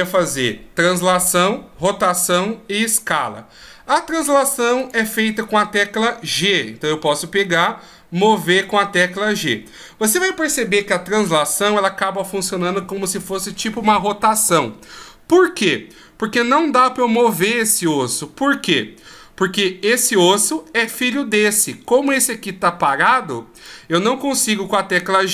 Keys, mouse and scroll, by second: 4.8 right click, 6.4 g, 20.8 right click, 23.6 right click, 24.3 g.